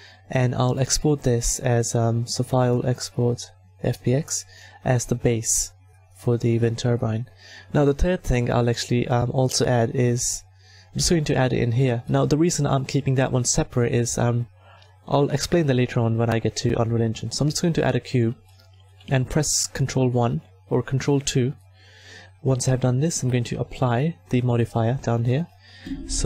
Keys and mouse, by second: 0.6 middle click, 6.1 click, 11.5 a, 15.3 shift+a, 19.8 ctrl+1, 20.8 ctrl+2, 24.2 click, 25.2 middle click.